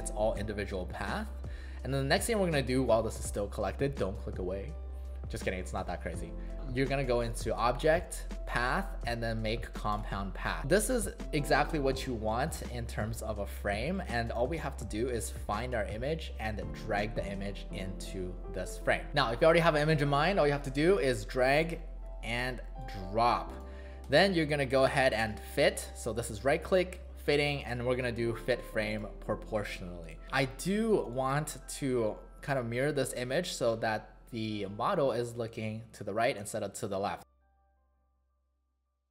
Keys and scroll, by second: 30.2 w, 31.0 space, 38.9 w.